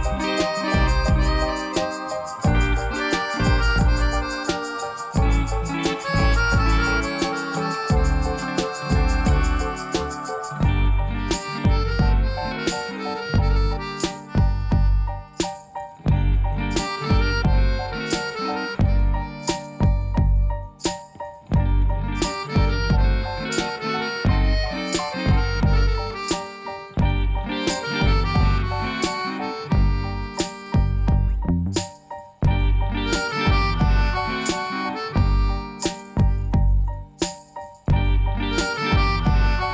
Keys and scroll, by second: 3.0 s, 3.2 a, 9.6 shift+a, 19.4 s, 20.0 g, 20.0 z, 21.3-22.6 typing, 24.9 g, 25.0 r, 25.1 e, 25.3 n, 25.5 Return, 27.2-28.1 typing, 28.2 Return, 29.4 g, 29.5 z, 35.6 shift+d, 35.7 x, 38.6 shift+r, 39.4 g, 39.6 x.